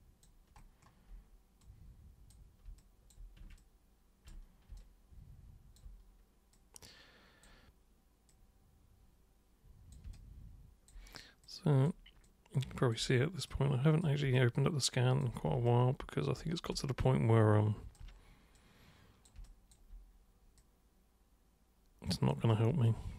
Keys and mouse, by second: 1.6-2.3 super+drag, 2.8 alt+super+click, 3.6-4.3 ctrl+shift+super+drag, 4.8-5.8 alt+super+drag, 6.5-7.5 super+drag, 8.3 super+click, 10.1 alt+super+click, 11.4 super+click, 12.2 alt+super+click, 13.5 super+click, 14.3 alt+super+click, 15.7 ctrl+shift+super+click, 16.8-18.0 alt+super+drag, 18.6-19.3 super+drag, 19.4 alt+super+click, 20.6 super+click, 22.9-23.1 alt+super+drag.